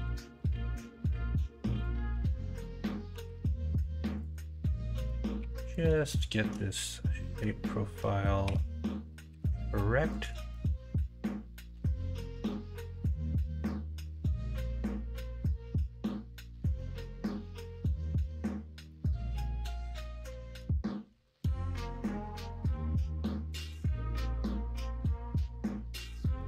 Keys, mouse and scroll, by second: 0.0 s, 3.1 r, 5.4 1, 6.1 shift+click, 8.4 m, 9.2 m, 18.8-20.6 middle drag, 21.1 KP_1, 21.4 KP_3.